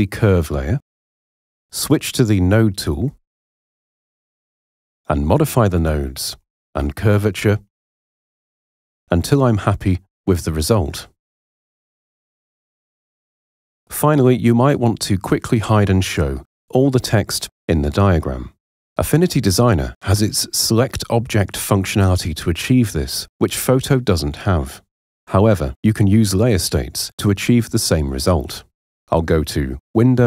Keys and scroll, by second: 1.7 p, 3.0 p, 15.8 h, 16.9 super+0.